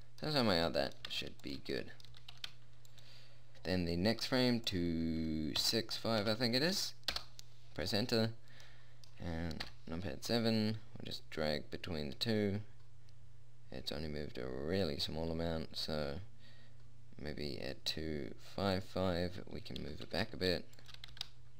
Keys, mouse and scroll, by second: 1.4 g, 2.5 g, 5.0-6.9 drag, 9.0-10.0 middle drag, 10.0 KP_7, 11.0 middle click, 11.7-13.6 drag, 19.1-21.1 drag, 20.2 g, 21.4 g.